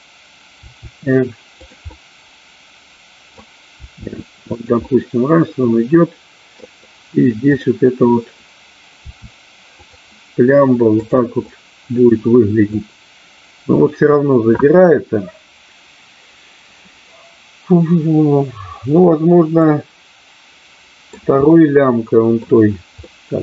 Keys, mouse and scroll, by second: 0.6 r, 1.6 click, 1.9-3.4 middle drag, 3.8 r, 4.9-6.5 middle drag, 7.5-8.5 drag, 9.8 click, 9.8 r, 11.5-12.8 middle drag, 19.6-21.1 middle drag, 21.4-22.4 middle drag, 23.0 middle click.